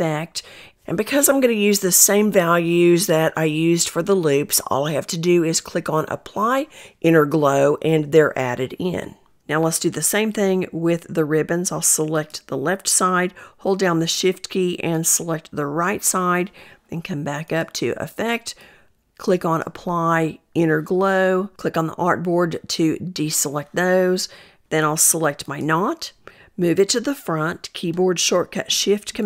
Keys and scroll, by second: 27.1 ctrl+shift+super+].